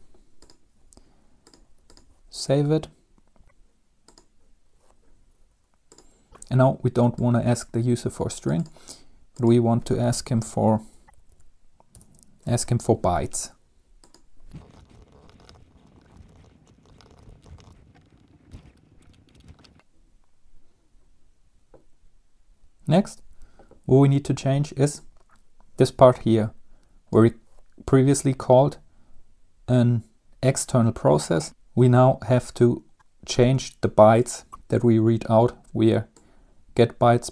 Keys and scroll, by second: 10.0-12.1 typing, 12.2 Return, 14.6-18.0 typing, 14.8 Up, 14.9 Up, 14.9 Left, 16.1 Right, 16.3 Left, 16.4 shift+End, 16.6 shift+Right, 19.5 ctrl+s.